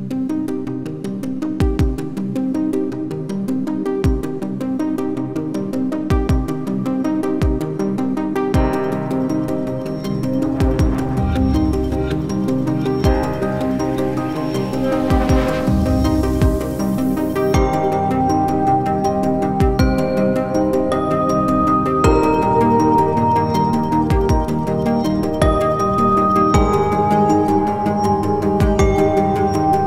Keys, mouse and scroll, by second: 1.9 scroll down 1, 2.2 alt+click, 6.6-6.9 scroll up 1, 6.9-7.6 scroll down 1, 8.6 double click, 12.7 double click, 19.6 ctrl+v.